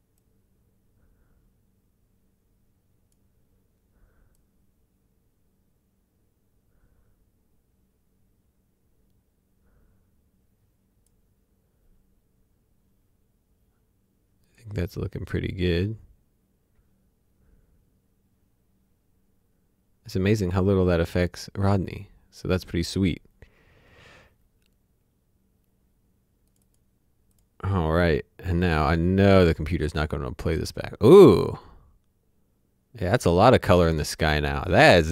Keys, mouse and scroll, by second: 14.5 click, 28.8 click.